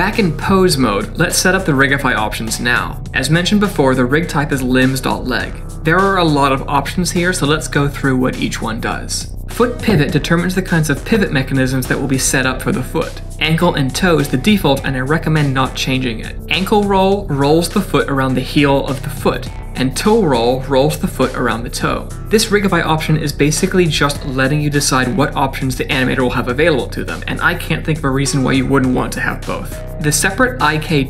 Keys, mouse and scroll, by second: 16.4 click, 17.1 r, 20.1 click, 20.8 r, 28.6 middle click.